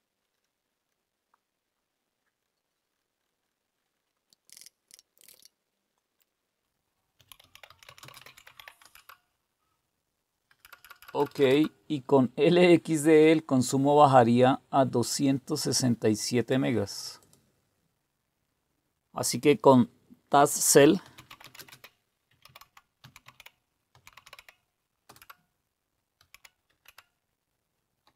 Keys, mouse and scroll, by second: 0.2 click, 0.3 click, 0.9 click, 2.4 click, 2.9 click, 3.2 click, 3.4 click, 3.8 click, 3.9 click, 4.4 ctrl++, 4.5 ctrl++, 4.5 ctrl++, 4.9-5.8 typing, 6.2 click, 6.9-9.0 typing, 10.5 Return, 10.5-11.4 typing, 20.2-24.7 typing, 25.0 Return, 25.9-28.1 typing.